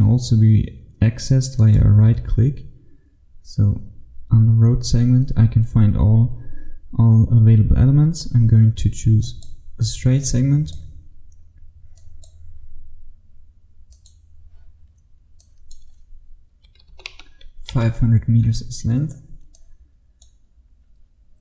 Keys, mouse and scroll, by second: 1.6 right click, 9.3 click, 14.0 click, 16.7 KP_5, 17.0 KP_0, 17.8 Return, 19.1-19.6 scroll down 1, 19.6 click, 20.6-21.1 scroll down 1, 21.1-21.4 scroll down 1.